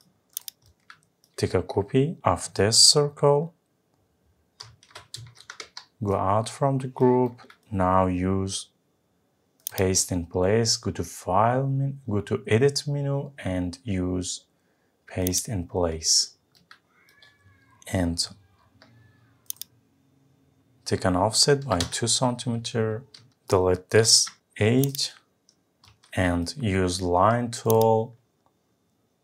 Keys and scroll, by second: 4.6 ctrl+c, 5.3 Escape, 21.8 Return, 24.0 Delete.